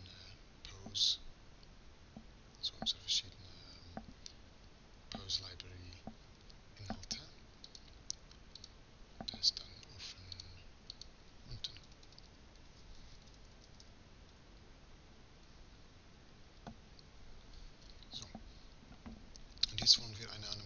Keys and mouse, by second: 8.3-11.7 drag, 11.7 BackSpace, 12.2 BackSpace.